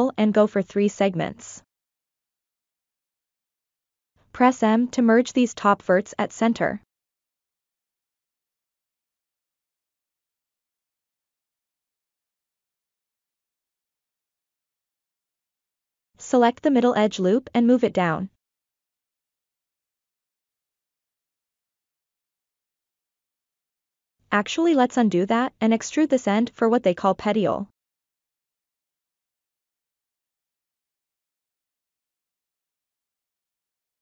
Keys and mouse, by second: 3.2 1, 3.4 click, 4.4 m, 6.8-7.3 ctrl+middle drag, 7.6-8.1 middle drag, 8.3-8.7 shift+middle drag, 8.9 middle click, 10.7 2, 11.0 click, 12.3 shift+click, 13.0 middle click, 13.7 shift+click, 15.7 alt+click, 16.5 middle click, 17.7-19.2 drag, 19.6-22.8 middle drag, 24.9 ctrl+z, 25.4 middle click, 26.7 shift+middle click, 26.8 shift+click, 27.7 2, 28.7 shift+click, 29.2 click, 30.8 e, 33.7-34.0 drag.